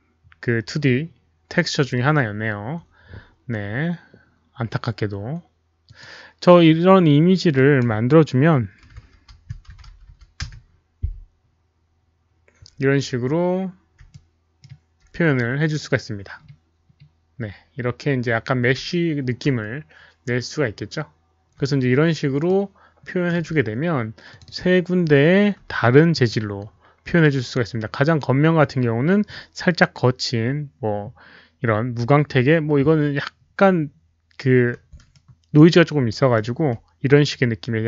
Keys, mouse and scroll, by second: 0.8 click, 1.2 Return, 1.2 middle click, 1.2 click, 1.2 KP_1, 1.2 KP_Decimal, 5.8 click, 5.9 Return, 5.9 KP_1, 5.9 KP_Decimal, 7.5 click, 8.8 Return, 8.8 click, 8.8-9.6 typing, 9.6 Tab, 9.6 click, 10.0 click, 10.4 Return, 11.5 Return, 11.5 Tab, 11.5 click, 11.5 KP_0, 11.5 KP_5, 13.3-14.0 scroll up 1, 14.1 Return, 14.1 Tab, 14.1 click, 14.1 KP_0, 14.1 KP_5, 14.2-14.6 alt+middle drag, 14.6 Tab, 14.6 click, 14.6 KP_0, 14.6 KP_5, 18.7 Return, 18.7 Tab, 18.7 alt+middle click, 18.7-20.6 typing, 19.4 Return, 19.4 Tab, 19.6 Return, 19.6 Tab, 19.6 alt+middle click, 20.6 Return, 20.6 alt+middle click, 22.4-23.2 alt+middle drag, 24.2 click, 24.4 click, 26.1 click, 32.8 click, 32.8 alt+middle click, 33.7-34.9 scroll up 1, 35.1-35.5 alt+middle drag, 36.0 alt+middle click.